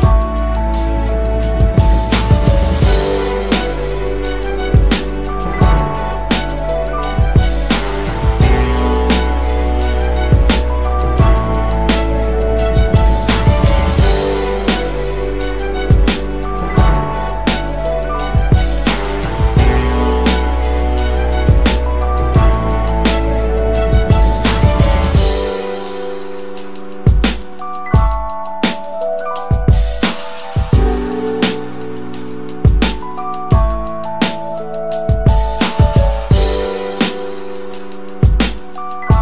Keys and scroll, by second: 3.8 Delete.